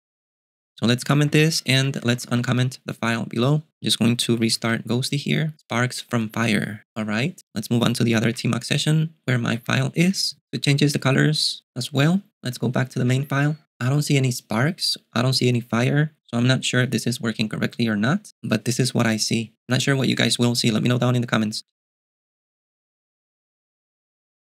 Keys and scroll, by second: 0.8-2.9 typing, 4.8 super+q, 8.4 ctrl+b, 8.5 ctrl+t, 9.6 k, 10.1 j, 13.2 ctrl+b.